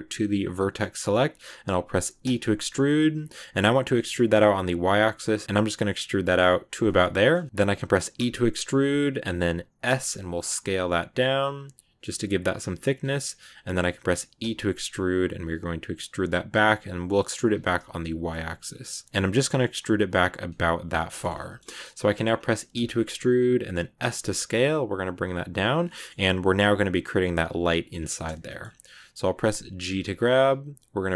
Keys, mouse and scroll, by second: 0.3 click, 0.7-2.1 middle drag, 2.1 e, 6.5 z, 6.7 middle click, 7.2 scroll down 1, 7.3 shift+middle click, 8.0 e, 20.8 shift+middle click, 21.2-21.5 scroll up 3, 21.3 middle click, 22.2-22.6 scroll down 1, 22.6 e, 25.7-27.8 middle drag, 27.8 scroll down 2, 28.0 middle click, 28.8 scroll up 2, 29.8 g.